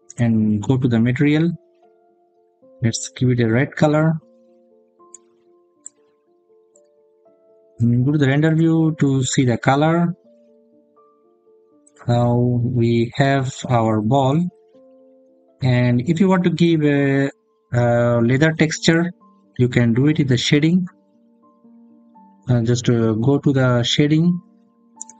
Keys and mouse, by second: 1.3 click, 6.5 click, 9.0 click, 11.6 click, 16.4 click.